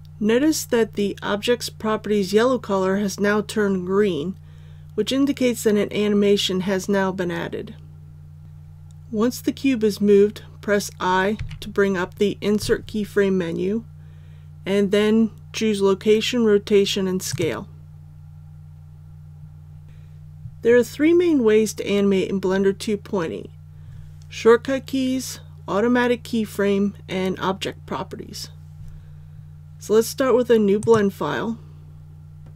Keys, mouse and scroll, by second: 11.3 i, 17.2 click.